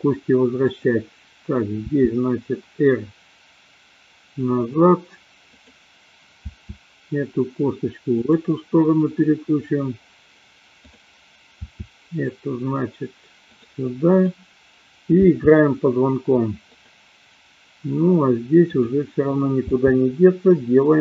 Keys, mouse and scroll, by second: 0.5 click, 1.9 r, 4.7 click, 6.4 r, 11.7 r, 14.2 click, 15.2 r, 18.5 click, 19.7 r.